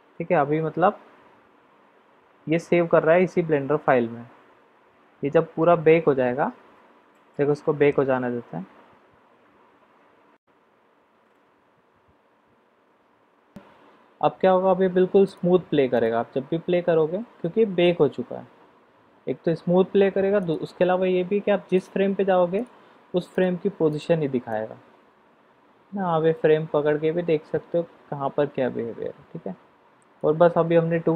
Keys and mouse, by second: 15.9 click, 20.4 click, 21.6 click, 22.5 click, 23.3 click, 23.9 click, 24.5-30.2 drag.